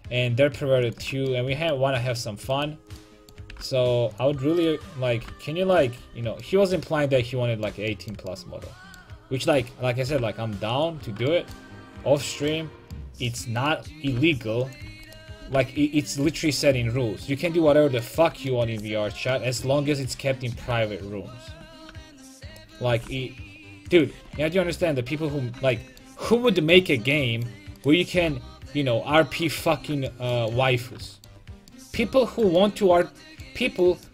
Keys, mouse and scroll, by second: 0.8 right click, 1.0-3.0 drag, 2.5 right click, 3.5 g, 5.2 right click, 5.2 g, 6.0 a, 6.4 click, 9.5-11.3 right drag, 10.1 g, 10.9 a, 13.6-16.9 right drag, 14.0 g, 14.7-17.3 drag, 14.9 a, 15.4 g, 16.4 a, 20.0-24.0 right drag, 20.6 g, 23.0 g, 24.1 a, 24.5 click, 25.0 click, 27.8 right click, 28.1 g, 29.3 right click, 29.7 a.